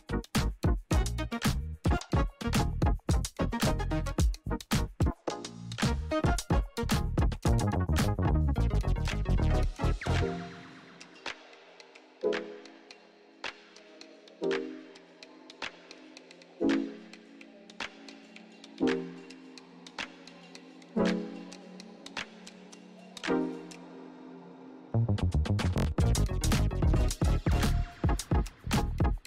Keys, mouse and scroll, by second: 7.6 click, 9.9 Return, 10.6 click, 13.4 t, 14.0-16.5 drag, 19.5-28.2 drag.